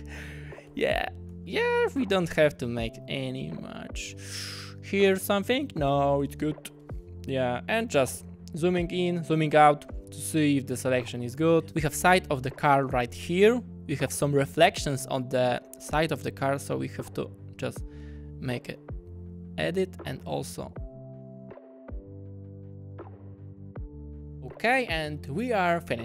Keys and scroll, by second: 3.0 w, 4.4 ., 5.0 space, 6.2 w, 6.8 /, 8.1 w, 12.7 ., 12.8 space, 20.6-24.4 typing.